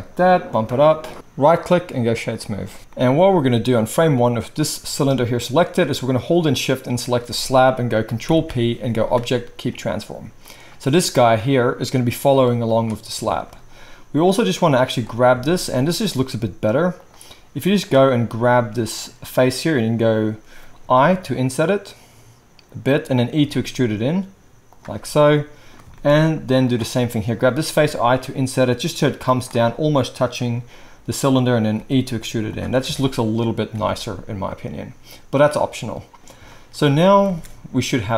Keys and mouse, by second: 1.1-5.5 middle drag, 4.9 g, 5.5-6.8 drag, 6.8-11.2 shift+middle drag, 8.2 ctrl+p, 11.2 click, 11.3-12.7 middle drag, 12.7 click, 12.8-17.0 middle drag, 15.3 Tab, 17.0 click, 17.8-34.3 middle drag, 21.0 i, 23.3 e, 27.8 i, 31.8 e, 32.8 Tab, 33.7 alt+a, 37.3 space.